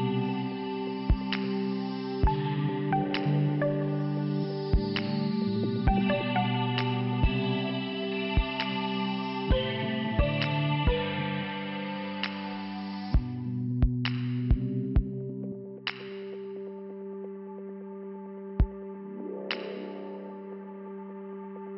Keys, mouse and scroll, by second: 1.2 click, 1.4 click, 1.5 click, 3.2 click, 3.4 click, 3.7 click, 4.0 click, 4.4 click, 4.5 click, 12.0 click, 12.1 click, 12.2 click, 12.4 click, 12.5 click, 12.6 click, 15.0 click, 15.2 click, 15.4 click, 15.6 click, 15.7 click, 16.1 click, 16.4 click, 16.7 click, 17.1 click, 17.4 click, 17.4 click, 17.5 click, 17.6 click, 18.5 click, 18.8 click.